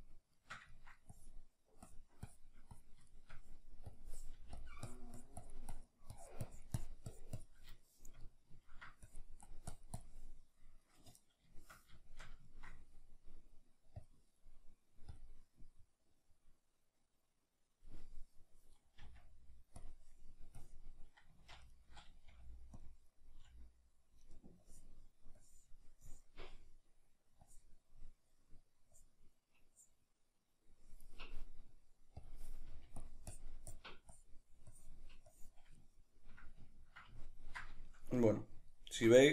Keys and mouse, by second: 1.1-3.1 drag, 3.1-4.6 shift+middle drag, 4.4 f, 4.6 click, 7.8-9.0 shift+middle drag, 9.0-12.1 drag, 12.1-16.3 shift+middle drag, 16.3 click, 19.0 f, 19.9 click, 21.4 ctrl+z, 21.4 click, 21.7-22.9 ctrl+middle drag, 22.3 f, 22.9 click, 23.5 f, 24.7-32.7 drag, 32.7 f, 35.8-39.3 ctrl+middle drag.